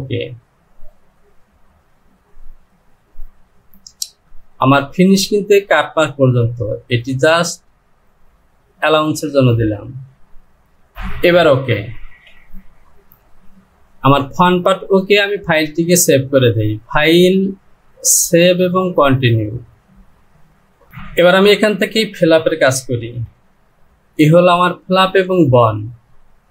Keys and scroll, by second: 12.1 Home, 20.9 j, 23.1 Return.